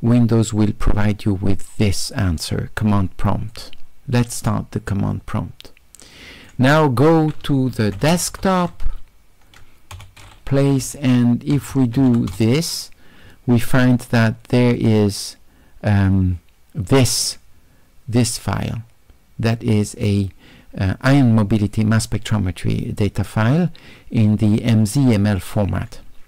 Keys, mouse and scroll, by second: 3.5 click, 5.1-6.5 drag, 7.7-9.2 typing, 10.9-12.6 typing, 14.7 click, 14.9 click, 17.1 click, 17.2 click.